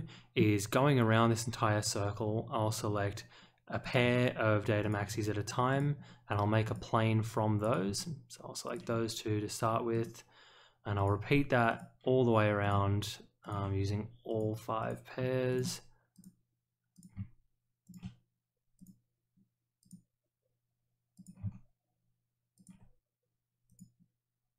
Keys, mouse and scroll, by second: 3.8 click, 4.8 ctrl+click, 5.7 click, 6.6 click, 7.6 click, 8.6 ctrl+click, 9.9 click, 10.9 click, 11.7 click, 12.6 click, 13.4 ctrl+click, 14.2 click, 14.8 click, 15.5 click, 16.1 click, 16.9 click, 17.8 ctrl+click, 18.7 click, 19.8 click, 21.1 click, 22.5 ctrl+click, 23.6 click.